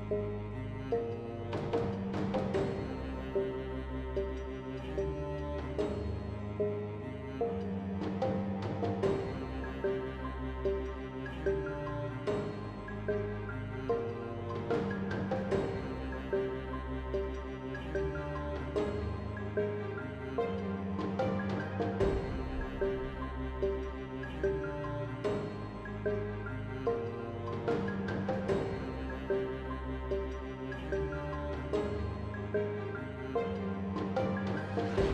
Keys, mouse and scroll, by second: 0.5 g, 3.6 n, 4.6 n, 5.4 Tab, 5.9 space, 14.1 t, 15.3 t, 17.9 t, 21.5 z, 24.5 F6, 32.3-33.7 right drag, 33.7 ctrl+z, 34.4 Tab, 34.9 x.